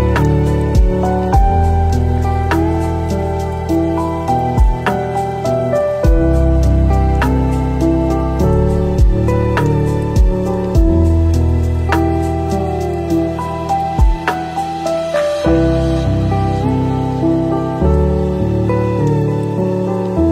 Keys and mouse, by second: 5.6 middle drag, 5.9-6.3 middle drag, 6.5 middle click, 7.2 shift+middle drag, 10.3-11.2 middle drag, 11.7 middle click, 11.7 click, 11.8 middle click, 12.1 click, 15.7-16.2 drag, 18.1-19.1 drag, 19.6-20.0 middle drag.